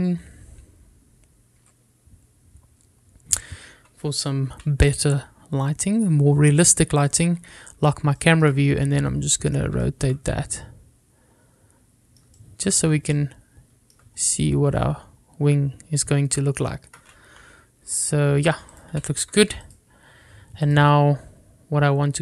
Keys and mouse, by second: 5.9 n, 7.1 click, 8.2 click, 8.6 n, 10.0 middle click, 11.8-13.8 middle drag, 18.5 n, 19.9 click, 20.1 n, 20.9 click.